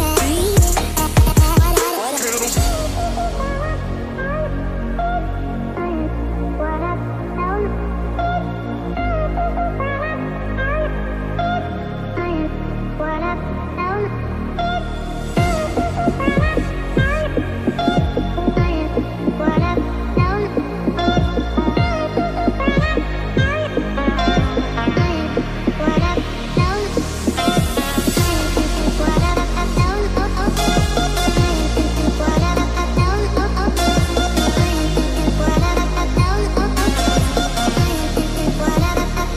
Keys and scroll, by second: 34.5 ctrl+shift+s.